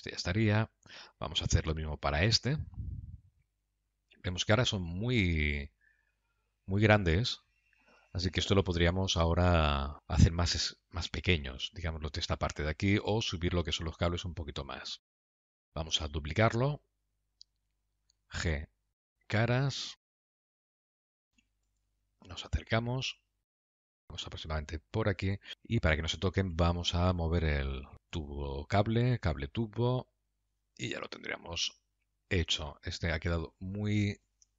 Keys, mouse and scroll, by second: 1.5 Tab, 2.4-3.2 scroll down 2, 4.5-5.6 scroll down 1, 5.6 middle click, 9.1 Tab, 10.1 middle click, 12.9 middle click, 14.4 scroll down 1, 15.2 scroll down 1, 15.4 shift+middle click, 16.8 shift+d, 20.9 middle click, 22.2 KP_Decimal, 22.8-23.3 scroll down 7, 23.4 middle click, 23.7 g, 26.1 click, 26.8 Tab, 27.8 click, 27.9 g, 29.5 click, 29.8 g, 31.4 scroll down 4, 31.7 middle click, 33.6 click, 34.0 Tab, 34.2 click.